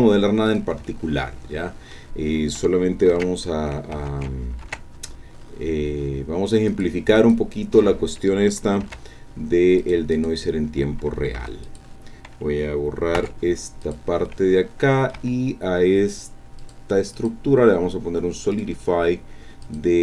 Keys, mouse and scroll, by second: 0.5-2.1 drag, 3.1 ctrl+r, 3.9 Tab, 4.6 ctrl+r, 5.1 ctrl+scroll up 3, 6.7 click, 7.2 click, 8.8 ctrl+r, 9.4-9.7 scroll up 2, 9.8 click, 10.1 click, 11.4 3, 11.6 click, 13.2 x, 13.8 click, 14.3-15.3 drag, 15.2 Tab, 16.6 click, 17.1 click, 18.5 click, 19.6 click.